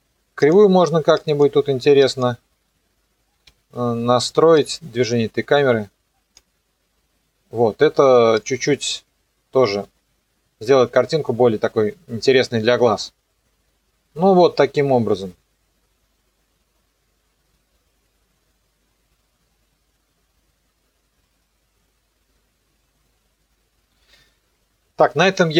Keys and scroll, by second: 3.5 F9, 9.9 KP_0.